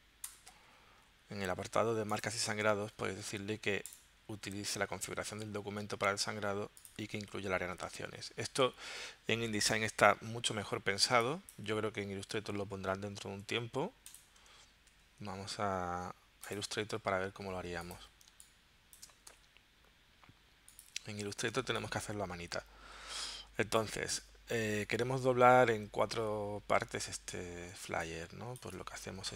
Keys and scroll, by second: 0.4 Return, 13.1 super+w, 14.9 super+q, 17.4 z, 18.3 space, 19.3 v, 21.6 space, 27.8 space.